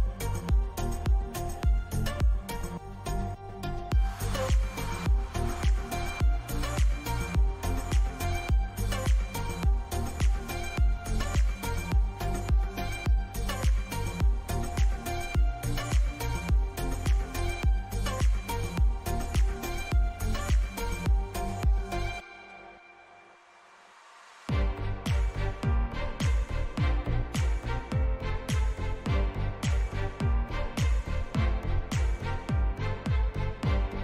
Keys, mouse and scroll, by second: 9.1 a, 10.5-14.5 middle drag, 14.5 k, 25.8 a, 26.3-29.1 middle drag, 31.2 k.